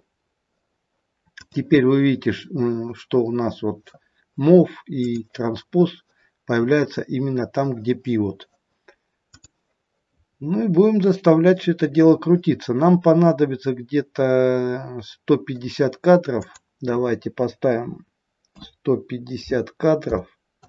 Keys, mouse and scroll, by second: 1.4 click, 5.0 click, 9.1 click, 10.7 scroll down 3, 16.3 click.